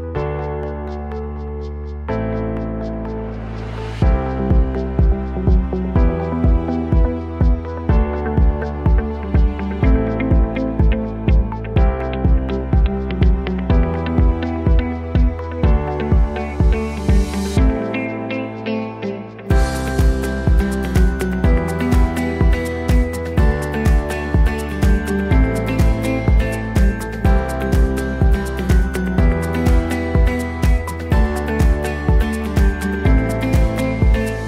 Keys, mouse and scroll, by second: 2.3 click, 4.4-11.1 drag, 4.4-34.4 right drag, 12.1-14.1 drag, 16.0-30.4 drag.